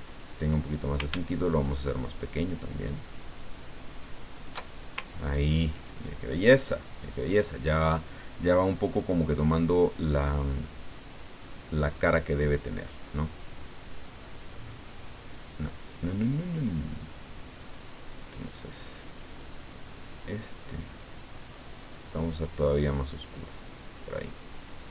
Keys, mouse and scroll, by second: 0.4 click, 1.5-4.9 ctrl+shift+drag, 5.2 ctrl+scroll up 2, 8.9 click, 11.5 click, 13.1-16.7 drag, 18.1 click, 20.0 click, 21.4-23.5 drag, 24.7-24.9 drag.